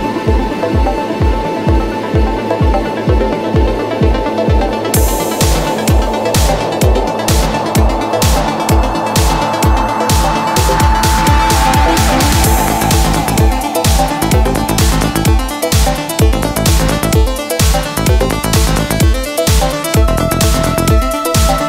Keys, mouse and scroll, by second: 0.0 scroll up 1, 2.1 alt+middle click, 5.7 click, 7.0 alt+middle click, 7.6 alt+middle click, 7.8 alt+middle click, 9.5 click, 9.7 click, 11.1 alt+middle click, 11.8 scroll down 1, 12.6 alt+middle click, 14.5-14.9 scroll down 1, 15.3 scroll down 1, 15.8 alt+middle click, 19.3 click, 19.4 click, 21.5 middle click.